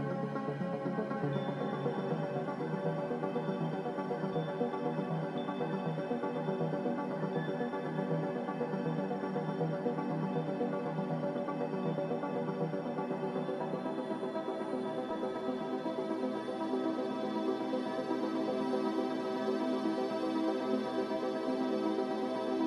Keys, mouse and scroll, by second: 1.4-3.9 typing, 9.9 z, 17.2 a.